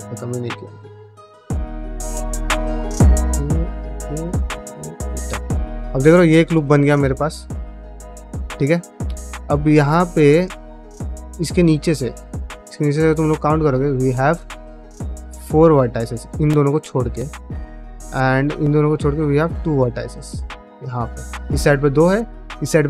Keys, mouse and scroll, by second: 0.4 middle click, 0.8 click, 1.0-5.7 typing, 1.4 middle click, 2.3 click, 3.2 click, 3.8 middle click, 4.3 click, 6.0 alt+click, 6.3 middle click, 6.7 middle click, 6.9 middle click, 7.6-8.8 middle drag, 9.0 middle click, 9.3 middle click, 9.6 middle click, 9.9 middle click, 10.4 middle click, 11.0 shift+middle click, 11.6 shift+middle click, 11.9 middle click, 12.4 shift+middle click, 13.0 1, 13.5 click, 14.4 ctrl+click, 16.9 middle click, 17.8 middle click, 19.6 shift+click, 20.0 ctrl+middle click, 20.5 shift+click, 20.8 middle click, 21.8 shift+middle click, 22.0 middle click.